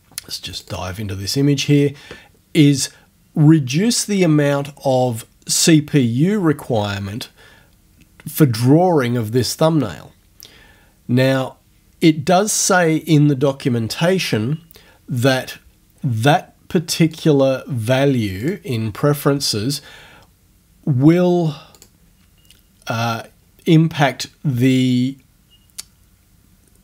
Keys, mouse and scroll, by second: 0.6 click, 17.1 click, 18.5 click, 21.8 click.